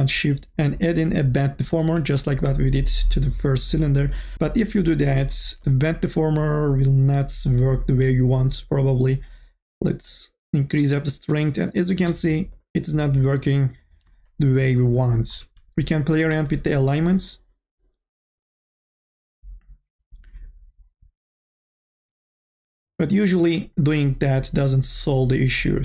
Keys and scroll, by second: 23.7 ctrl+z.